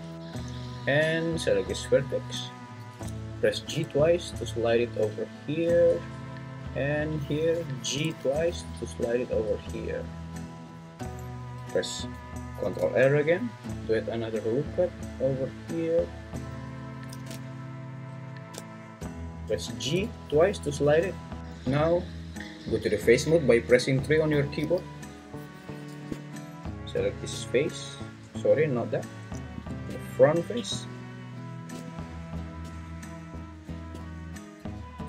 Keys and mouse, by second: 2.8 g, 3.7 g, 5.9 click, 7.9 g, 8.1 g, 12.6 ctrl+r, 15.2 click, 19.1 click, 19.8 g, 20.0 g, 21.4 ctrl+z, 21.4 3, 24.6 3, 34.8 ctrl+z.